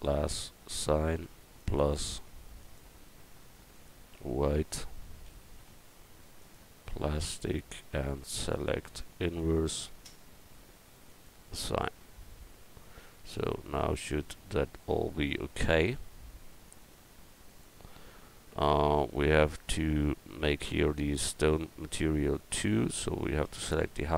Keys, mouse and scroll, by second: 8.4 click, 14.2 Tab, 16.7-19.4 drag, 20.9 Tab, 22.3 click, 22.9 Tab, 23.5 Tab.